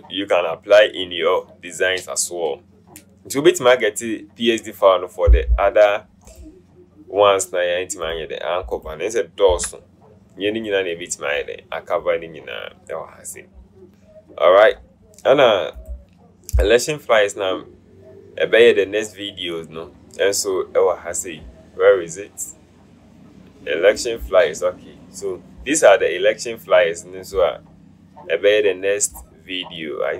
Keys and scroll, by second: 9.8 BackSpace.